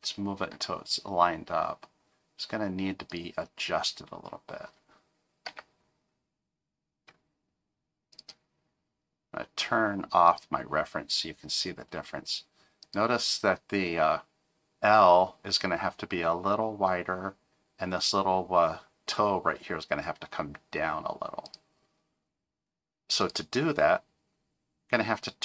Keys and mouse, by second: 0.5 g, 5.4 g, 10.3 click, 11.5 click, 12.8 click, 21.4 click, 23.2 click.